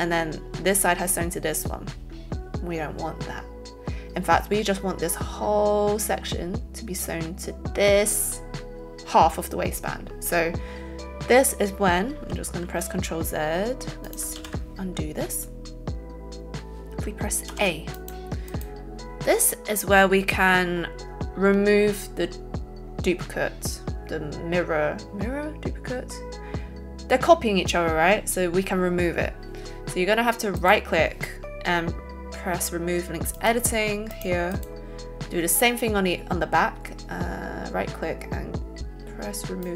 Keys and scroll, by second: 14.3 ctrl+z, 17.5 a.